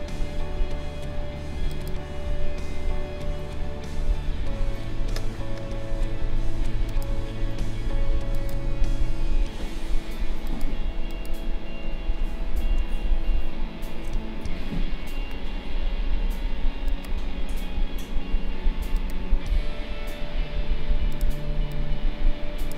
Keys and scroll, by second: 12.9 shift+-, 14.4 ctrl+-.